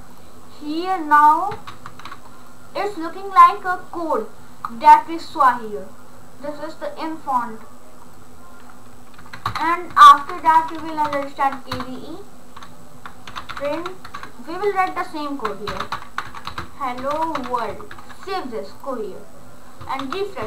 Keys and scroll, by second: 9.2 Down, 9.5 Return, 10.0-11.7 typing, 11.8 Return, 13.1-17.8 typing, 17.9 ctrl+s.